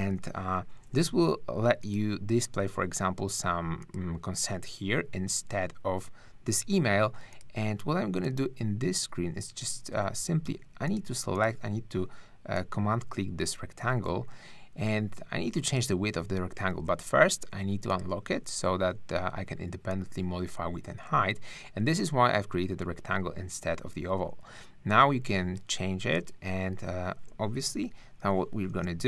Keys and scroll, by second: 9.8 super+z, 16.7 super+z, 27.7 super+=, 28.8 super+space.